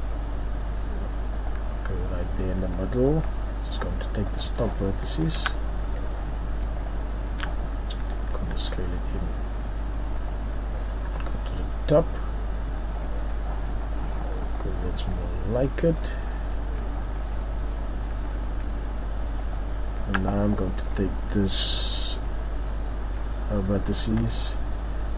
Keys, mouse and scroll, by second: 1.8-3.1 scroll up 3, 3.1 right click, 4.3 alt+right click, 5.1 alt+shift+right click, 5.6 scroll down 3, 5.8 scroll up 1, 6.8 alt+shift+right click, 8.4 s, 10.3 click, 11.1 KP_7, 13.0 scroll down 1, 13.2 middle click, 13.7-14.0 scroll up 1, 14.0 middle click, 15.3-15.7 scroll up 3, 15.7 middle click, 15.7 scroll down 1, 17.2 middle click, 18.0-18.7 scroll up 2, 19.4 alt+right click.